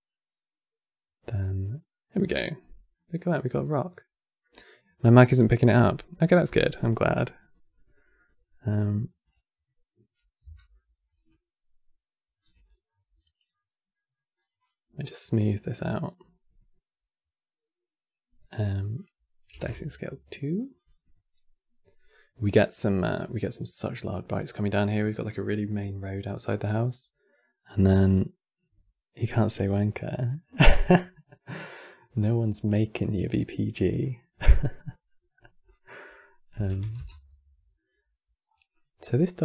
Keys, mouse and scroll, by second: 2.6-5.7 middle drag, 9.0-10.4 drag, 10.4-12.4 middle drag, 12.4 scroll down 2, 12.6-14.1 middle drag, 14.1 click, 14.8-17.4 right drag, 18.6-22.7 drag, 34.4-35.4 middle drag, 35.4-36.5 drag, 36.5 KP_1, 37.6-38.6 scroll up 9, 38.8-39.4 middle drag.